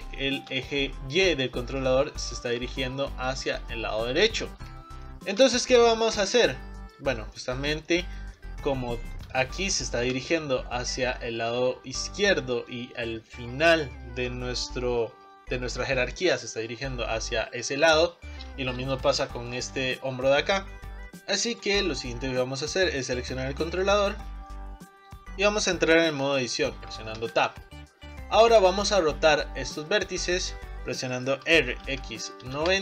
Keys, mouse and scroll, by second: 0.3-6.3 shift+middle drag, 6.3-7.4 drag, 7.4-8.8 shift+middle drag, 8.8 scroll down 2, 9.1-10.6 shift+middle drag, 10.6-12.3 scroll up 4, 12.3 scroll down 1, 12.6-15.6 middle drag, 15.6-19.7 drag, 19.0 shift+middle click, 20.6 scroll down 5, 21.0 click, 21.3 middle click, 21.6 click, 22.0 scroll down 3, 22.1 middle click, 22.6-23.7 scroll up 3, 23.7 click, 24.6-27.2 middle drag, 27.2 Tab, 28.2-30.6 middle drag, 30.6 r, 31.5 r.